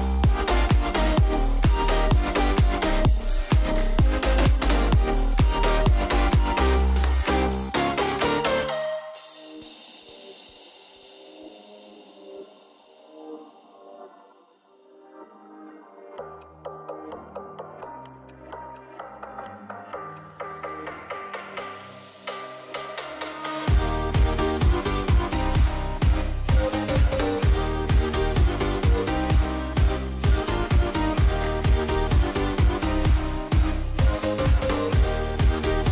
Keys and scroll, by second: 4.8 Escape, 6.3 super+c, 8.0 shift+super+v, 12.6 Escape, 29.4 super+0, 30.4 super+=, 35.3 super+-.